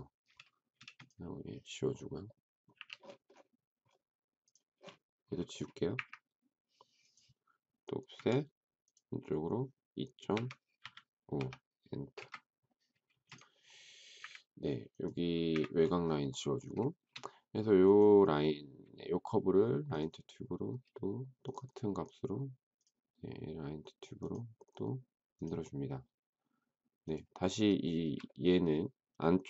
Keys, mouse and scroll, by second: 0.7 space, 2.7 Delete, 5.8 Delete, 8.1 f, 10.0-11.3 typing, 12.1 Return, 13.1 space, 14.1 Delete, 15.5 Delete, 27.8 shift+middle click.